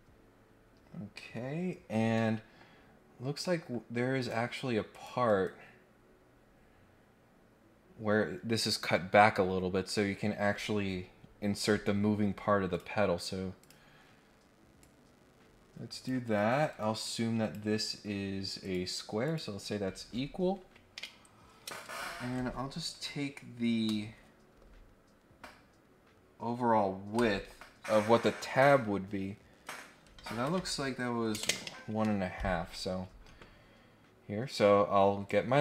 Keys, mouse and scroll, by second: 2.1 middle click, 2.8 scroll up 1, 3.0 scroll down 2, 3.2 scroll up 1, 3.4 middle click, 4.2 click, 4.9 click, 5.8 scroll down 2, 6.2-6.6 scroll up 4, 12.7 click, 13.6 click, 14.8-16.0 drag, 16.2 Escape, 16.7 Escape, 17.0 click, 18.6 click, 19.2 click, 34.5 right click.